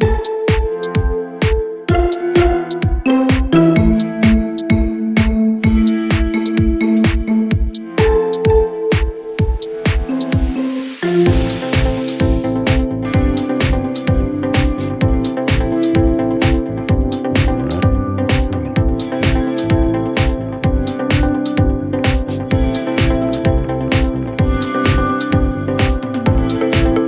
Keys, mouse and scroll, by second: 0.4 click, 1.2 click, 2.6 click, 3.0 click, 3.6 ctrl+c, 4.4 click, 4.9 ctrl+v, 5.6 click, 6.0 ctrl+v, 6.6 click, 7.2 ctrl+v, 7.5 scroll, 8.6 scroll, 8.7 click, 9.0 ctrl+v, 10.9 click, 11.9 click, 17.2 click, 22.8 click, 22.9 click, 23.8 click, 24.4 click, 26.7 click.